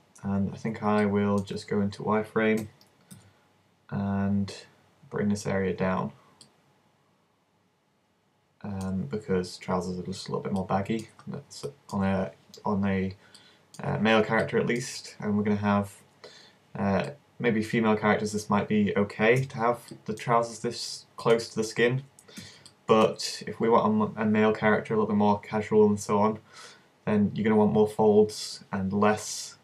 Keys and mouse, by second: 1.1 alt+shift+right click, 1.6 z, 2.7 a, 3.2 b, 6.5-8.3 drag, 8.3 middle click, 9.1 z, 19.4 z, 20.6 a, 22.4 z.